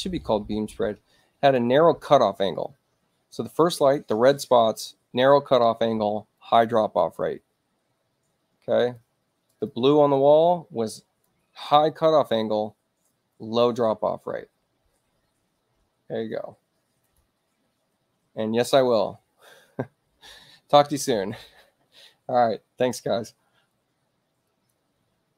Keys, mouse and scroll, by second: 3.6 click, 6.4 click, 8.8 click, 9.5 click, 11.0 click, 13.4 click, 17.1 click, 24.5 click.